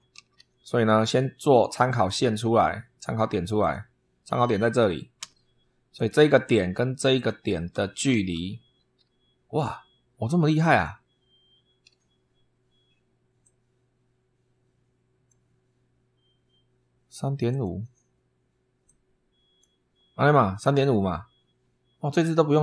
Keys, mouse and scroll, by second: 0.0 super+3, 1.8 click, 3.4 click, 5.0 Escape, 5.8 click, 7.0 click, 7.8 shift+v, 13.2-15.3 drag, 17.3 click, 18.6 click.